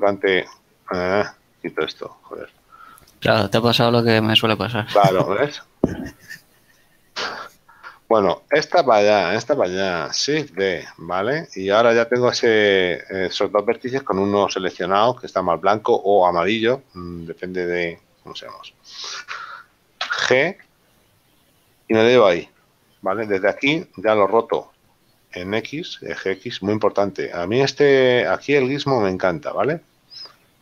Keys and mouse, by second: 1.1 ctrl+right click, 2.5 click, 5.9 right click, 7.5 right click, 10.8 shift+d, 11.1 Return.